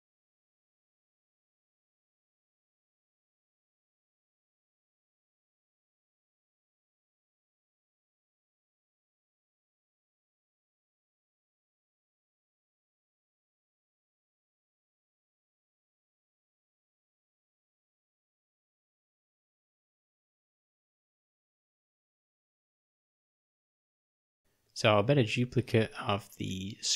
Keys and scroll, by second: 4.6 v, 4.6 ;, 6.4 ctrl+alt+,, 17.1 v, 18.7 o, 19.9 u, 22.0 d, 23.4 4.